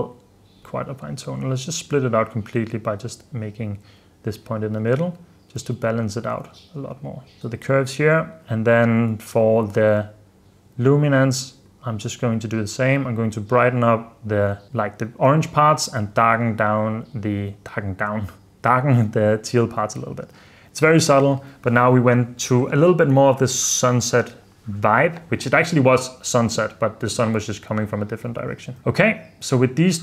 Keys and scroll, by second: 4.9 super+d, 5.7 super+d, 6.6 super+s, 7.4 super+s, 19.7 super+f, 20.1 super+d, 21.2 super+d, 28.5 super+f, 28.8 super+s.